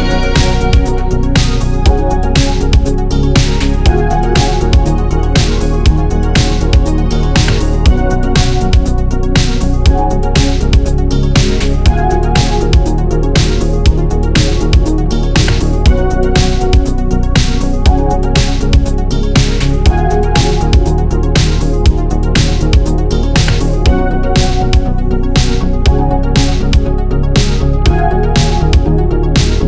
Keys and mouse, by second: 0.5 shift+middle drag, 1.0-1.4 drag, 1.6 shift+drag, 3.1 shift+click, 3.9 shift+d, 23.0-23.3 shift+middle drag, 23.5-23.9 shift+middle drag, 24.2 middle drag, 24.8 shift+middle drag, 25.1 middle drag, 25.8-26.4 ctrl+middle drag, 27.2-27.8 middle drag, 28.0-29.6 shift+middle drag.